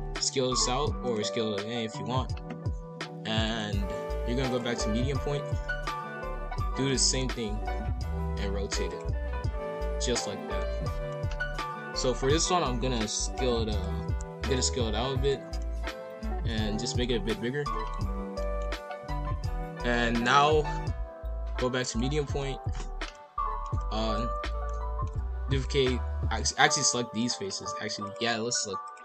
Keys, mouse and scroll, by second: 1.7-3.4 middle drag, 3.4-5.6 drag, 5.6 middle click, 6.0 KP_5, 6.1 KP_1, 6.8 shift+d, 7.2 r, 9.3-11.2 middle drag, 11.2-12.0 scroll up 1, 12.9-14.3 drag, 14.3 s, 15.6-19.9 middle drag, 19.9-22.1 drag, 22.1 KP_5, 22.2 KP_1, 22.7-23.0 scroll down 3, 23.0 scroll up 1, 23.1-24.6 middle drag, 24.6-25.5 scroll up 1, 25.5 shift+click, 26.4 shift+click, 26.9 middle click, 27.2 scroll up 1, 28.0 shift+click, 28.8 shift+click.